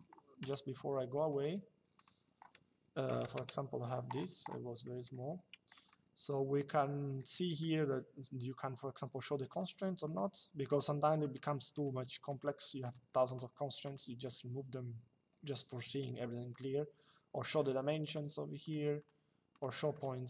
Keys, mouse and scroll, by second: 1.0 click, 2.8 KP_1, 3.1 Return, 4.5 middle click, 5.8 Escape, 9.2 click, 16.2 click.